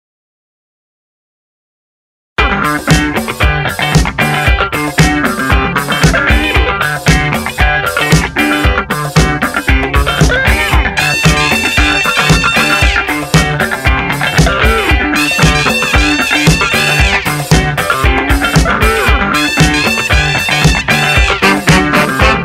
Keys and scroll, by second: 1.5 Return, 2.0 Up, 2.7 Down, 3.1 Up, 3.3 Down, 5.5 b, 7.0 F7, 8.4 ctrl+shift+n, 10.2-12.4 typing, 13.4 Return.